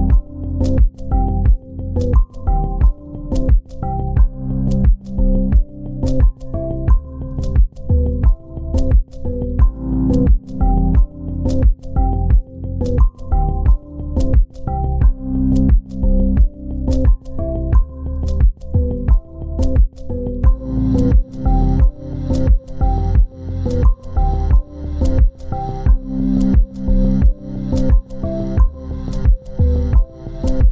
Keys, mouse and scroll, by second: 0.1 4, 0.4 Return, 1.9 shift+click, 2.5 c, 4.7 double click, 8.9 2, 10.5 typing, 11.8 typing, 12.1 Tab, 12.8 typing, 14.3 typing, 15.7 typing, 16.8 typing, 17.5 Return, 21.1-21.7 typing, 22.9 typing, 23.4 Return, 29.3 double click, 29.9 ctrl+space.